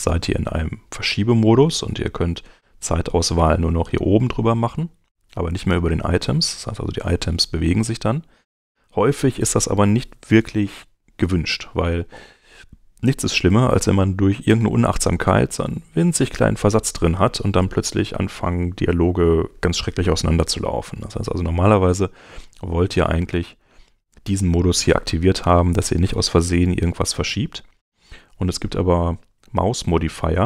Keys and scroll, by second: 5.1 Escape, 27.3 ⟲.